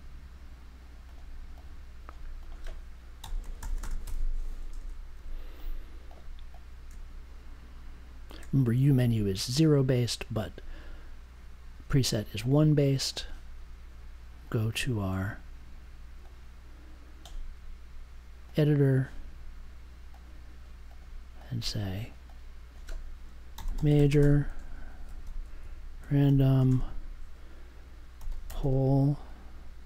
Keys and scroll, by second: 2.9-5.1 typing, 23.3-24.8 typing, 26.2 m, 26.5 ,, 26.6 space, 27.9-29.8 typing.